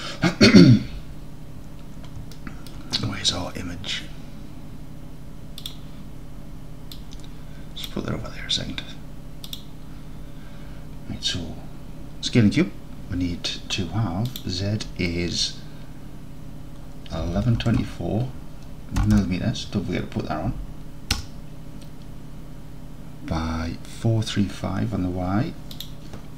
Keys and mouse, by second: 2.4 alt+click, 14.4-24.8 drag, 17.5 KP_1, 19.2 m, 25.8-26.3 drag.